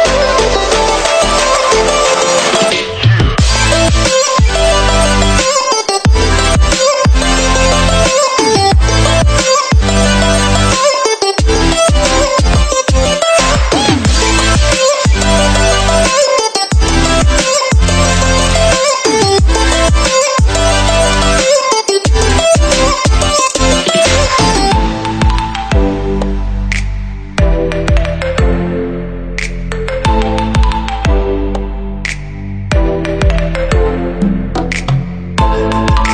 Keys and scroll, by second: 14.4 ctrl+z, 17.3 Delete, 25.9 ctrl+z, 33.1 ctrl+z, 34.8 ctrl+c, 35.1 ctrl+v.